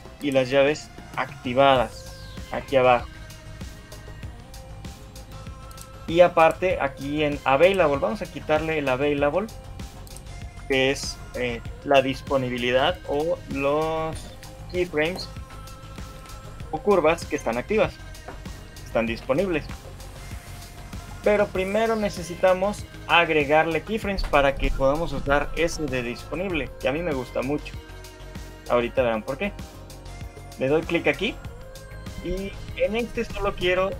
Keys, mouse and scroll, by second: 9.8 click, 9.8 shift+middle click, 10.4 shift+middle click, 14.1 shift+middle click, 19.1 shift+middle click, 20.5 middle click.